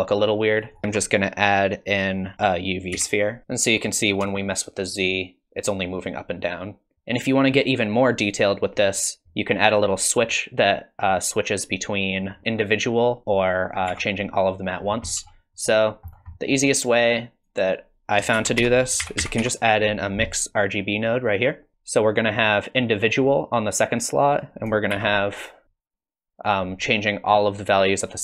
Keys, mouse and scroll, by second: 0.8 shift+a, 3.4 scroll up 3, 4.5 shift+click, 6.9 click, 8.9 click, 13.6 click, 13.9 Tab, 14.8 scroll down 6, 15.1 middle click, 15.6-16.1 scroll up 1, 16.1-16.5 scroll down 2, 16.3 middle click, 16.9 click, 17.6 click, 18.3 shift+a, 21.7-22.2 scroll up 3, 22.2 click, 24.3 click, 25.7 shift+d, 27.2 click.